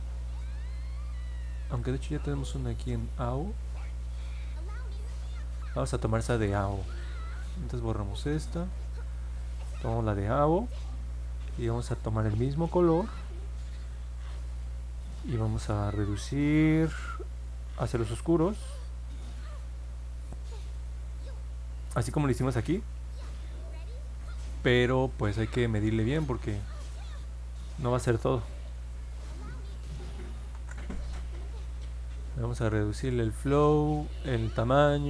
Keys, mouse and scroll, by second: 1.6 click, 7.6 click, 8.4 click, 9.5 middle click, 10.0 middle click, 18.1-20.3 drag, 29.0 click, 30.5 ctrl+z.